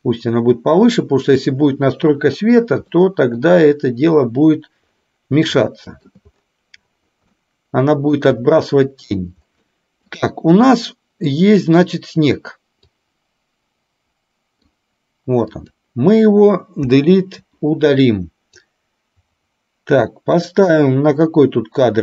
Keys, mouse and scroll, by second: 2.9-3.4 shift+middle drag, 5.8-6.3 shift+middle drag, 7.4-8.3 middle drag, 9.7-10.1 middle drag, 11.3 click, 12.9-14.7 drag, 15.6 click, 17.2 Delete, 18.7 click.